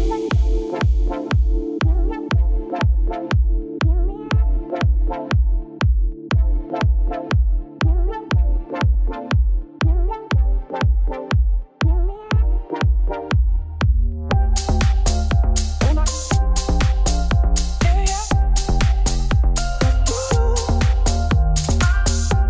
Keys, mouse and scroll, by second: 0.3 shift+right click, 0.9 shift+a, 1.3 Tab, 1.6 r, 3.2 s, 4.0 middle click, 4.3 e, 7.0 Tab, 7.8 shift+click, 8.3 ctrl+l, 9.0 right click, 10.0 click, 10.1 click, 10.4 shift+middle click, 10.7 KP_Decimal, 11.3 click, 11.5 click, 12.4-14.0 drag, 14.0-15.2 middle drag, 17.1-18.5 middle drag, 18.5 click, 18.9 scroll down 6, 20.1 click, 20.8 scroll up 1, 22.2-22.4 drag.